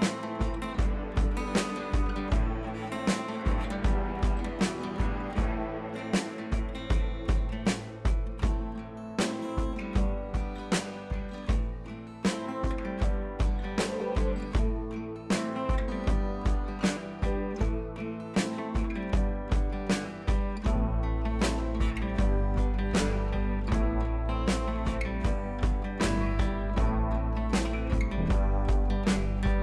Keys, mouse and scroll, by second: 1.1-1.4 drag, 5.0 click, 6.4-8.6 drag, 12.5-13.1 click, 14.8-15.1 drag, 19.7 ctrl+[, 20.5 Down, 22.3-27.7 drag, 23.7-25.6 drag, 26.7-27.5 click.